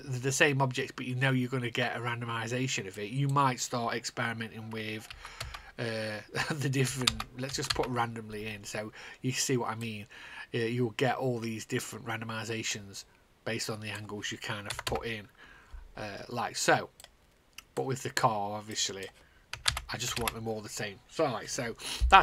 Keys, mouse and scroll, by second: 3.5 click, 5.0 scroll down 2, 6.1 Return, 6.8 KP_2, 8.2 Return, 10.3 click, 14.3 click, 14.6 KP_0, 15.4 Return, 16.9 click, 17.5 click, 19.4 KP_0, 20.3 Return, 20.7 KP_0.